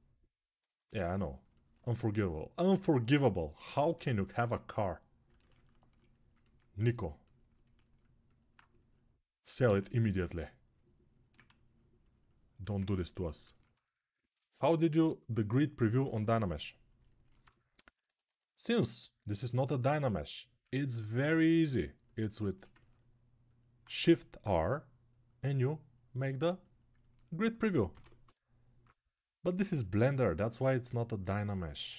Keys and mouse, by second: 1.2-6.1 ctrl+alt+right drag, 6.1-7.3 ctrl+alt+drag, 9.6 alt+q, 12.8-17.9 alt+drag, 22.5 ctrl+alt+click, 23.7 1, 27.7 m, 28.0 [, 28.5 [, 28.6 [, 30.7-31.9 right drag.